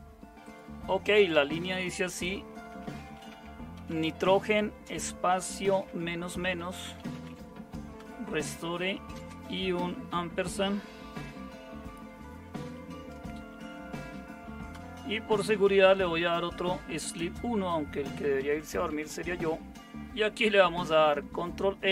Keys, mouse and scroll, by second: 2.1-8.0 typing, 9.1 typing, 12.8-13.7 typing, 14.7-18.9 typing, 20.8-21.9 typing.